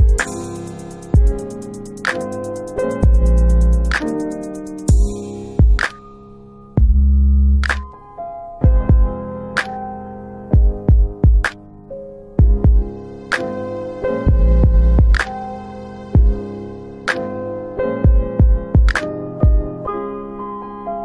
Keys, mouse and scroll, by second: 4.3 click, 5.6 click, 6.6 click, 9.5 click, 20.4 click.